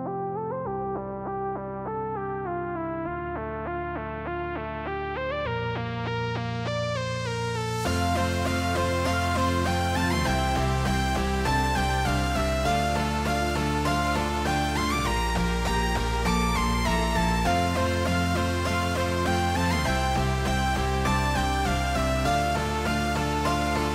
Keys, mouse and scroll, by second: 2.5 middle click, 4.7 shift+middle click, 7.5 click, 9.7 click, 16.1 click, 16.7 click, 18.6 t, 23.2-23.9 drag.